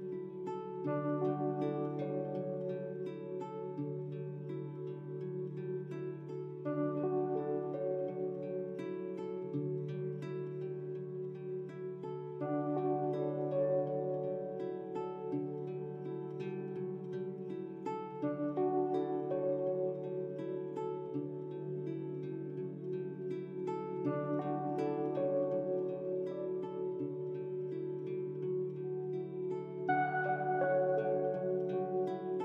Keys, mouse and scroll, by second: 0.6-3.6 drag, 16.4-19.5 drag, 23.5 click, 28.9-32.0 drag.